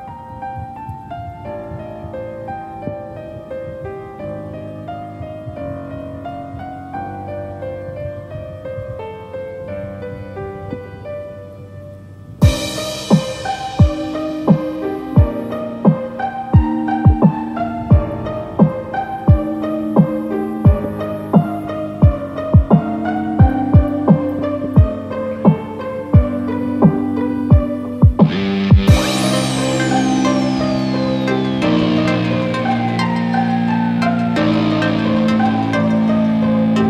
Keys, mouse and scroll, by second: 6.4 2, 14.9-15.7 scroll down 7, 16.0 middle click, 16.7 middle click, 17.0 shift+middle click, 17.2 scroll up 1, 22.2 ctrl+2, 22.2 shift+middle click, 22.2 scroll up 5, 23.7 click, 24.1 click, 25.3 Tab, 27.1 ctrl+r.